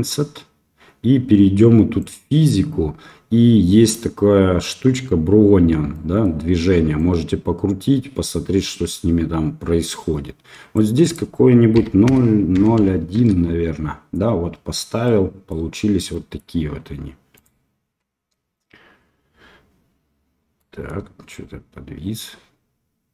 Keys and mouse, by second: 2.0 click, 5.9 middle click, 6.9-10.7 drag, 11.0-13.7 drag, 15.0-15.5 middle drag, 16.1 middle click, 18.3-23.1 drag.